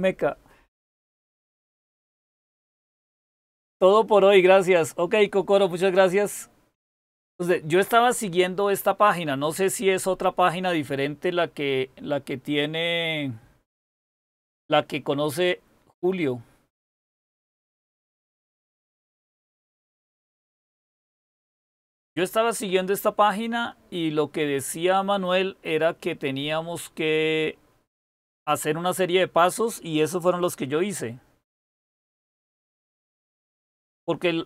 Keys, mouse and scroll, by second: 23.1-23.6 scroll down 1, 23.6-24.8 scroll down 1, 24.8-25.3 scroll down 1, 25.3-26.3 scroll down 1, 26.3-27.2 scroll down 1, 27.2-28.9 scroll down 1, 28.9-30.2 scroll down 1, 30.2-33.3 scroll down 1, 33.3-34.0 scroll down 1, 34.0-34.4 scroll down 1.